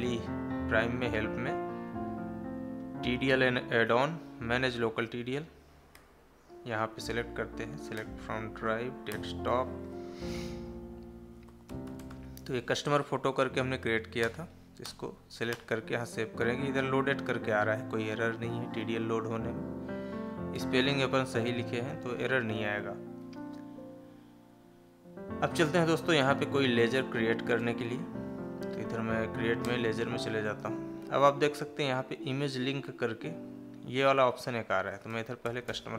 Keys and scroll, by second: 7.1 Up, 8.6 Down, 20.4 Escape, 28.9 Down.